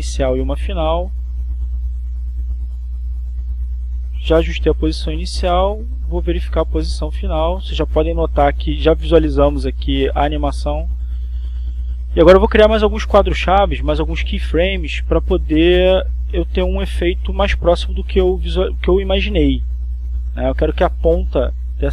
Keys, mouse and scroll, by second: 0.7-3.0 drag, 3.1-5.0 drag, 5.9 click, 8.1-13.0 drag, 13.6 click, 14.4-16.2 drag, 17.2 click, 18.8-21.9 drag.